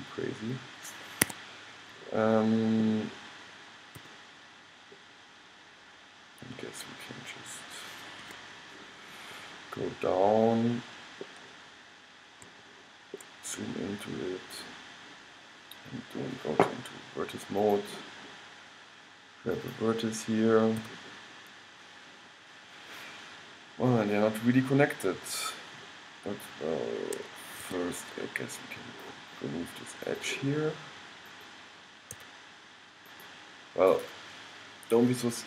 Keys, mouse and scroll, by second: 4.1 g, 9.5-13.8 middle drag, 14.6-16.6 middle drag, 17.7-21.6 drag, 21.0 g, 30.2-33.4 drag, 32.3 x.